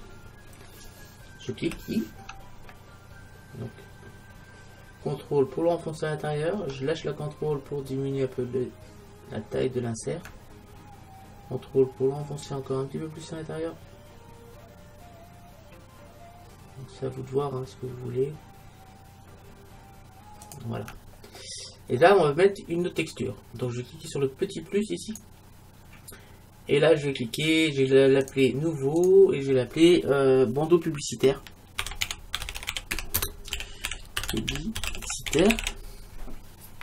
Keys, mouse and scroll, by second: 20.6-22.4 drag, 21.4-25.1 middle drag, 25.1-26.9 drag, 28.3-30.8 drag.